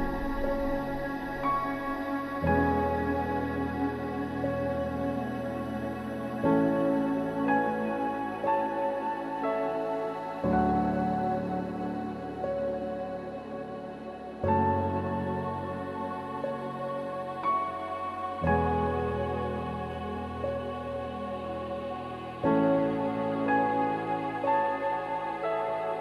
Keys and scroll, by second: 3.4 ctrl+=, 19.2 ctrl+-, 19.3 ctrl+-, 19.5 ctrl+-, 19.6 ctrl+-, 23.7 ctrl+=, 23.8 ctrl+=.